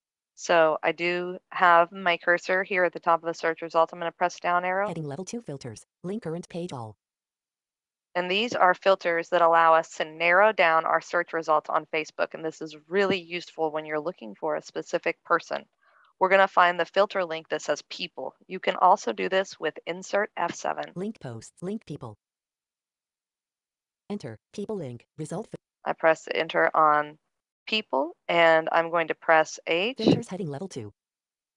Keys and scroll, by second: 29.3 h.